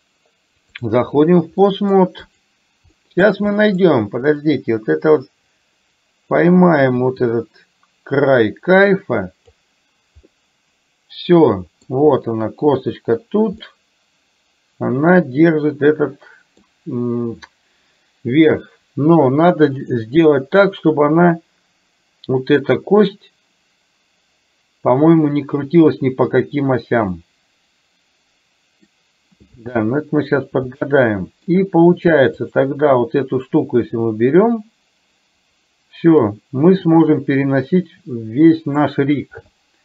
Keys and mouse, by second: 1.8 middle click, 2.3 click, 3.0 middle click, 3.7 middle click, 4.4 click, 5.2-10.0 drag, 10.4-11.9 middle drag, 13.8-16.7 middle drag, 19.9 click, 27.3-29.0 middle drag, 29.9 KP_1, 30.8-31.5 shift+middle drag, 32.5 click, 34.2-39.4 drag.